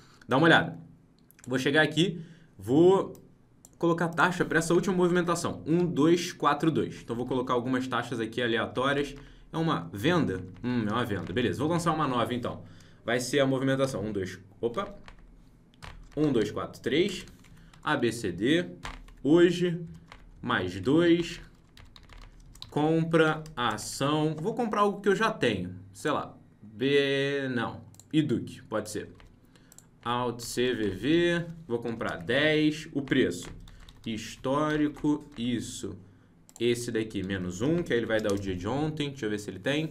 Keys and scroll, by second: 7.2 ctrl+shift+Right, 9.1 ctrl+Left, 14.8 ctrl+Up, 18.8 ctrl+;, 21.3 ctrl+c, 29.1 ctrl+c.